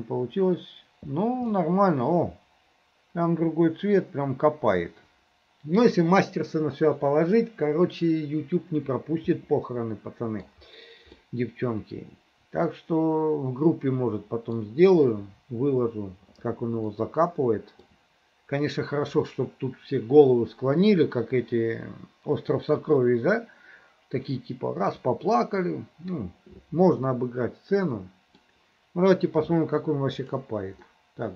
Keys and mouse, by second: 0.0 click, 0.0 s, 1.7-5.2 middle drag, 5.2 middle click, 9.4-10.5 middle drag, 11.2-14.6 middle drag, 13.4 click, 17.0 middle click, 27.1 middle click, 28.1 click, 28.1 middle click, 30.3 click, 30.3 middle click, 31.0 click, 31.1 middle click.